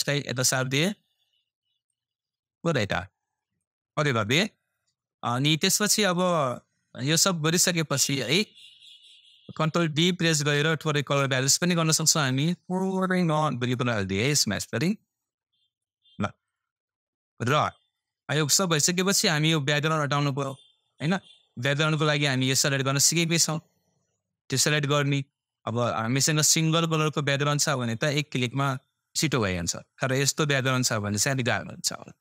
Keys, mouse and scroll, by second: 21.0-23.8 scroll down 1.